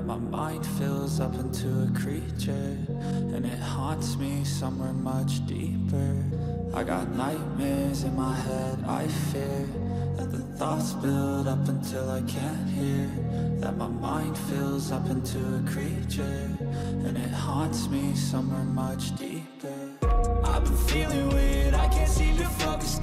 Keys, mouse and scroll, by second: 4.8 right click, 9.7 double click, 12.8 double click, 14.9-16.2 typing, 18.0 ctrl+a, 18.6 ctrl+v, 20.2 ctrl+a.